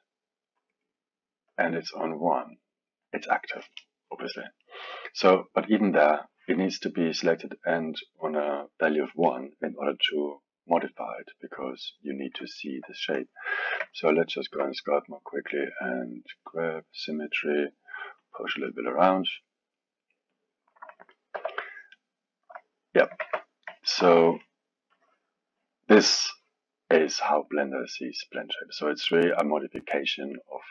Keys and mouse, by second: 1.5-5.5 drag, 5.6 click, 7.2 click, 12.5 ctrl+middle click, 13.1 click, 13.8 ctrl+Tab, 17.5-21.3 drag, 21.3 f, 22.0-23.2 drag, 23.2 ctrl+Tab, 23.8-24.9 alt+middle drag, 24.9-27.9 drag.